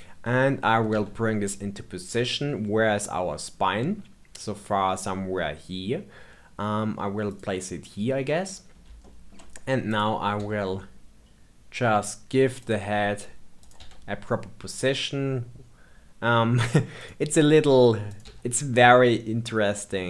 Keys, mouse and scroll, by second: 0.9 g, 8.4-9.0 scroll up 2, 9.0-9.8 shift+middle drag, 9.8 click, 10.3 g, 13.6 click, 13.7 g, 18.0 click, 18.2 g.